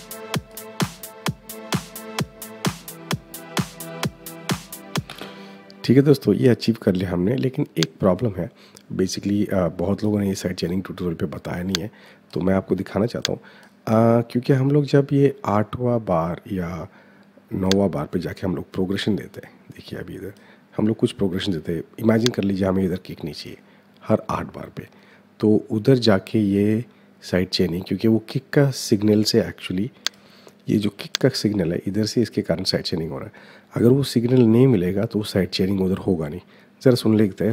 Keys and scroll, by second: 4.9 space.